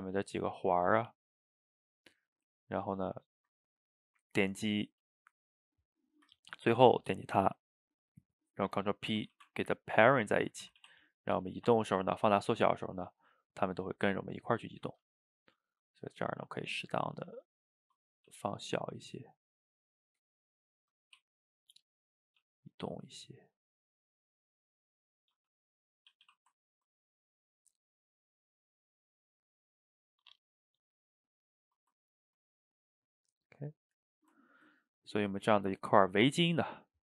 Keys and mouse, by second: 0.0 click, 0.4 shift+click, 0.9 shift+click, 2.7-6.0 middle drag, 6.0 shift+click, 9.3 ctrl+p, 10.7 a, 10.8 a, 11.2 click, 11.4 g, 13.4-16.2 ctrl+middle drag, 16.2 s, 19.0-21.2 middle drag, 21.2 r, 22.4 g, 23.6-25.4 middle drag, 25.4 g, 26.1 a, 26.3 a, 26.6-30.9 ctrl+middle drag, 31.6-34.2 middle drag, 34.2 shift+right click, 34.5-36.4 ctrl+middle drag, 36.4 click.